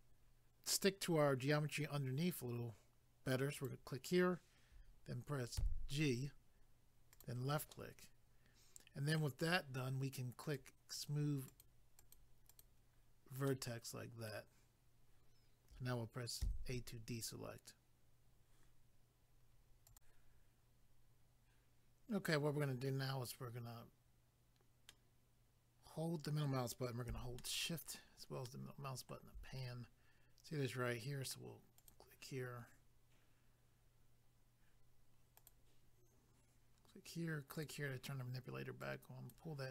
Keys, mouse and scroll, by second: 3.5 click, 3.7 click, 7.1 click, 7.2 click, 7.7 middle click, 10.4 click, 10.6 click, 10.9 click, 11.1 double click, 11.5 click, 11.6 click, 12.0 click, 12.2 double click, 12.5 click, 12.6 click, 13.5 middle click, 16.4 a, 19.8 click, 20.0 click, 24.9 middle click, 27.4 shift+middle click, 29.6 scroll up 1, 31.8 click, 31.9 click, 35.3 click, 35.5 click, 37.5 click, 37.6 click, 38.8 click.